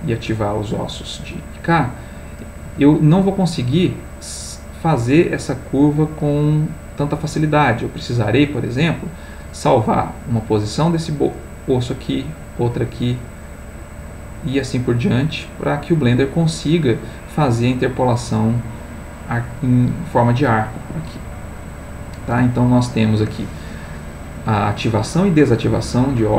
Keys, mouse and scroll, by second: 0.4 click, 1.8 click, 2.6 g, 20.8 Escape, 21.5-23.7 middle drag.